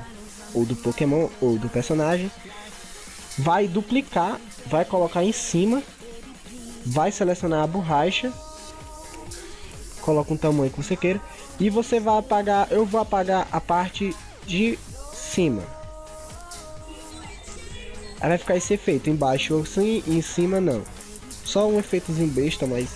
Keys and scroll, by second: 4.3 ctrl+j.